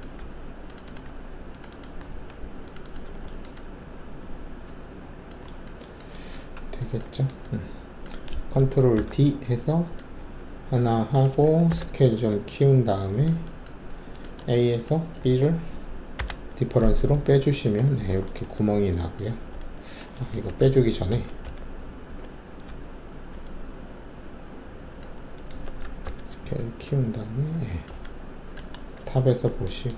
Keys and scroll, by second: 0.2 alt+q, 1.0 alt+q, 2.0 alt+q, 3.0 alt+q, 6.5 alt+`, 8.9 ctrl+d, 11.7 r, 16.1 alt+shift+o, 20.7 ctrl+alt+z, 21.6 ctrl+z, 21.9 ctrl+z, 22.1 ctrl+z, 26.0 alt+r, 28.9 alt+shift+2.